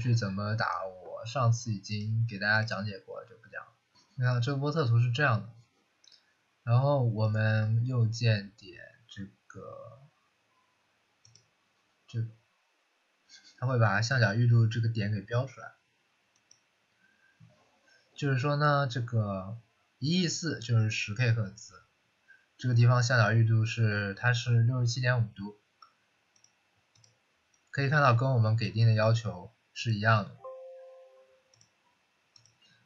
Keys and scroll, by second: 30.0 Delete.